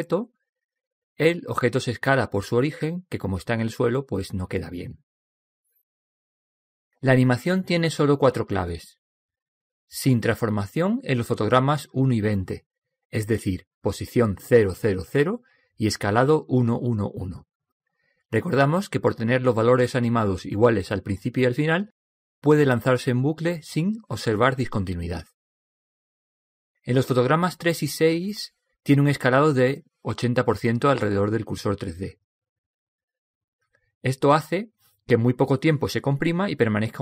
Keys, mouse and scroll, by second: 12.7-14.7 drag, 18.0-19.9 drag, 28.3-30.2 drag, 33.5-35.2 drag.